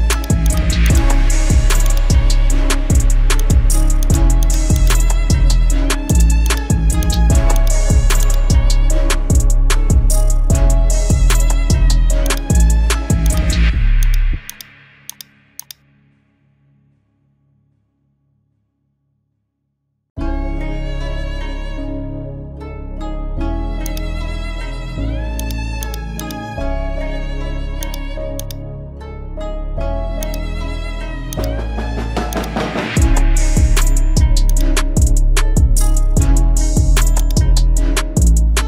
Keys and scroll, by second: 3.2 x, 19.6 ctrl+alt+shift+e.